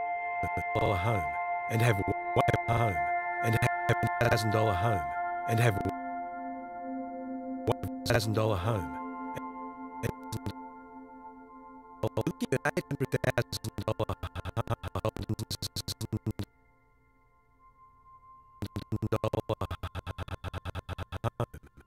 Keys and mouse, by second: 0.7 space, 1.9 space, 2.3 click, 2.7 space, 3.5 space, 3.8 click, 4.2 space, 5.8 space, 7.6 click, 8.0 space, 9.2 space, 10.0 click, 11.1 click, 12.0 click, 16.4 click, 17.3 i, 17.7 click, 18.0 click, 18.6-21.8 drag.